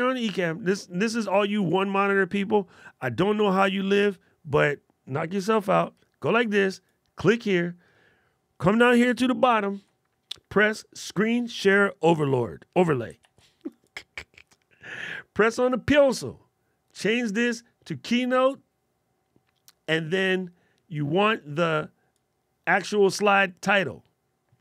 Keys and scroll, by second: 9.3 alt+super+8, 13.1 alt+super+8.